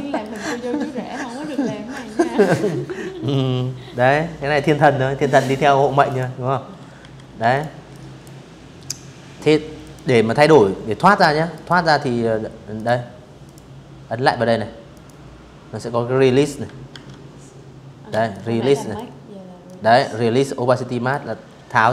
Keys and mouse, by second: 3.7 click, 4.6 z, 5.0 v, 5.2 click, 5.6 click, 7.5 click, 8.0 click, 9.2 click, 10.4 click, 11.1 click, 12.6 click, 14.6 ctrl+1, 15.9 ctrl+click, 17.3-18.7 ctrl+drag, 20.8 Escape, 21.4 v, 21.8 click.